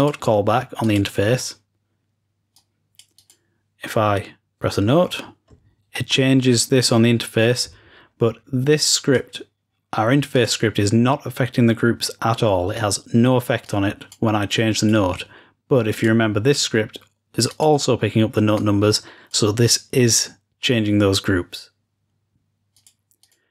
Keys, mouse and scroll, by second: 2.5-3.8 drag, 8.7-10.0 drag, 10.3-11.5 drag, 13.6-15.8 drag, 15.9-18.3 drag, 18.5-19.8 drag, 22.7 click.